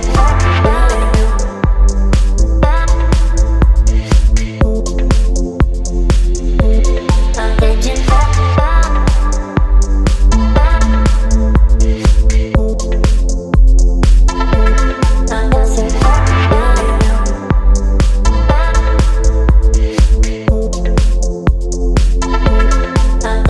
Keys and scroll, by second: 5.3 ctrl+z, 7.0 [, 7.1 [, 7.2 [, 7.3 [, 8.5-9.0 typing, 13.2 [, 13.3 [, 13.4 [, 13.6 [, 14.8 space, 18.0 e, 19.2 b, 21.3 [, 21.8 [.